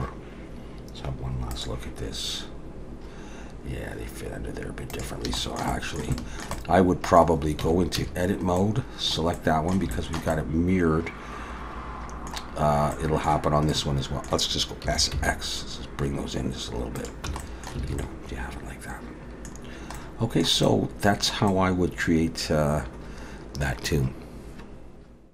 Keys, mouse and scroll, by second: 5.4 shift+middle click, 6.1 shift+middle click, 6.6 middle click, 7.6 Tab, 8.0 a, 8.6 middle click, 9.4 middle click, 9.9 shift+middle click, 10.3 shift+middle click, 13.0 middle click, 13.7 middle click, 14.8 s, 17.3 Tab, 17.4 middle click, 17.8 alt+a, 18.0 middle click, 19.6-20.4 scroll down 2, 20.0 middle click, 20.6 middle click, 21.5 middle click.